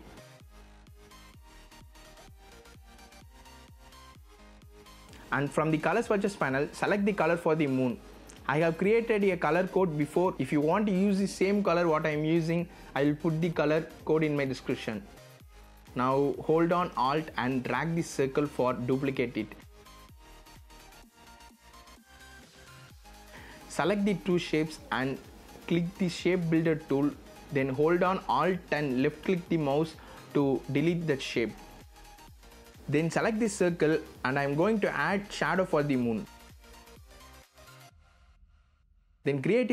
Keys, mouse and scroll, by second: 0.4 click, 0.7 BackSpace, 0.9 KP_5, 1.9-10.2 drag, 11.1 z, 11.5 click, 11.7 v, 12.0 click, 15.0 click, 15.8-20.0 alt+drag, 21.2 z, 21.5-25.2 drag, 29.2 alt+click, 31.6 v, 31.8 click, 37.5 z, 37.8 click.